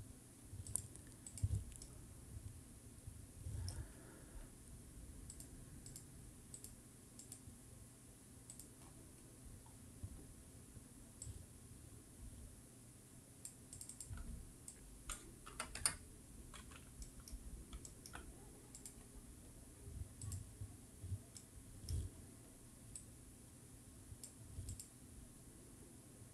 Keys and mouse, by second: 0.6 click, 1.7-3.7 middle drag, 5.2 click, 5.8 click, 6.5 click, 7.2 click, 8.4 click, 11.1-13.4 drag, 13.7-15.8 drag, 16.9 middle click, 17.8 shift+middle click, 18.7-20.2 drag, 21.3 middle click, 22.9-24.2 drag, 24.6-26.3 drag.